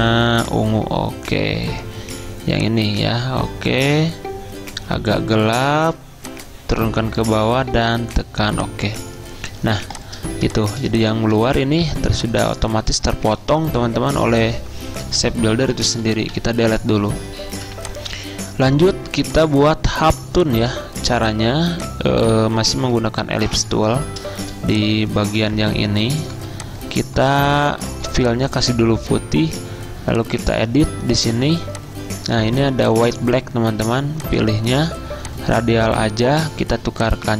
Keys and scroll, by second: 16.3 Delete, 27.3 v.